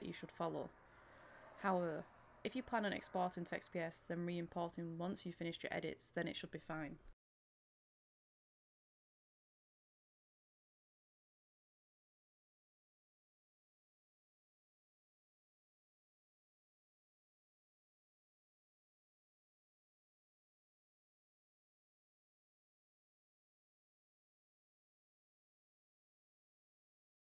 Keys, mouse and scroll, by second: 0.0 right click, 0.1 click, 4.7 right click, 5.2 click, 5.4 middle click, 5.7 click, 5.9 scroll down 1, 6.2 middle click, 6.8 click, 8.7 middle click, 8.9 click, 9.1 middle click, 9.4 scroll up 1, 9.7 click, 10.8 Return, 11.3 click, 12.0 Return, 12.3 click, 12.7 Return, 14.0 click, 14.3 Return, 14.5 click, 15.2 right click, 15.4-19.5 drag, 21.2 right click, 21.7 click, 23.2 scroll down 1, 23.9 click, 25.4 shift+click, 26.4 right click.